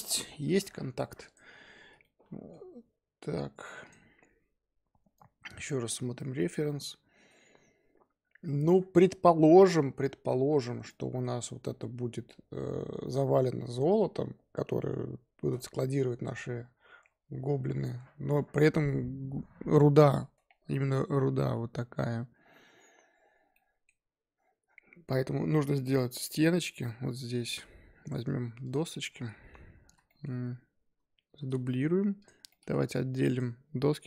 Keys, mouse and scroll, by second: 1.2 click, 1.9 scroll down 1, 2.0-3.8 middle drag, 3.8 click, 28.6 click, 29.1-29.6 scroll down 1, 29.6-30.0 scroll up 2, 30.0-31.2 shift+middle drag, 31.2 shift+d, 32.5-32.8 middle drag, 32.8 Tab, 32.9-33.3 scroll up 2, 33.3 click.